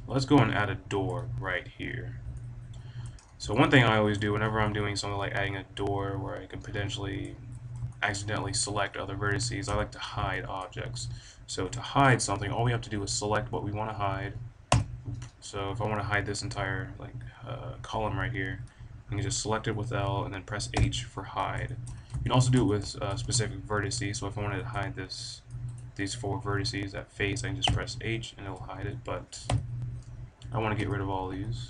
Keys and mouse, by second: 0.4-2.3 middle drag, 2.5-4.9 middle drag, 4.9-6.0 drag, 6.3 middle click, 7.8-9.6 drag, 9.7-11.9 drag, 11.9 middle click, 12.2-14.7 middle drag, 14.7 l, 16.5 middle drag, 20.7 h, 22.0 click, 22.0 middle click, 22.1 click, 22.2 middle click, 22.3 click, 22.4 middle drag, 23.1 b, 27.6 h, 29.4-31.6 typing, 29.9 middle click.